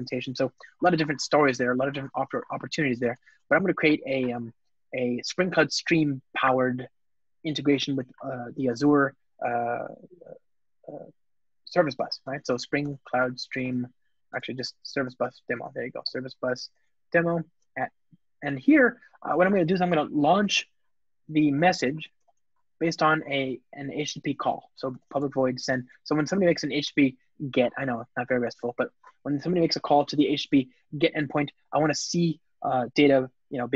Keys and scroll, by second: 2.7 Return, 14.1 alt+BackSpace, 21.0 Return, 28.0 Return, 28.2 alt+super+l.